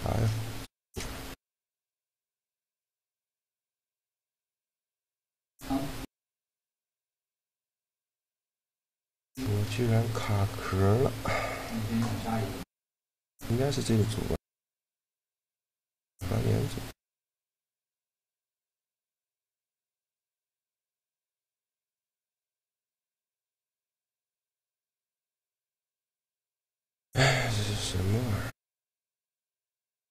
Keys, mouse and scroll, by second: 3.1-5.6 right drag, 5.9-8.2 middle drag, 8.2-11.7 drag, 11.7 middle click, 15.6-17.3 drag, 18.1-19.9 drag, 19.7-23.0 right drag, 23.8-25.7 drag, 25.2-26.9 right drag, 26.1 shift+l, 27.6-29.4 middle drag, 28.4 a, 29.4 a, 29.6 b.